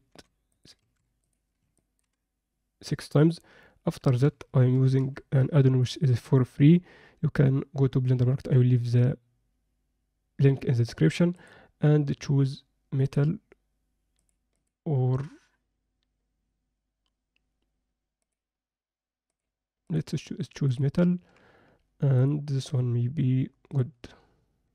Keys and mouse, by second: 0.8 ctrl+a, 1.7 ctrl+middle click, 4.2 n, 4.7 n, 5.0 n, 5.9 click, 11.3-13.1 drag, 14.1 click, 14.7-18.3 drag, 19.3-20.0 drag, 20.7-22.3 drag.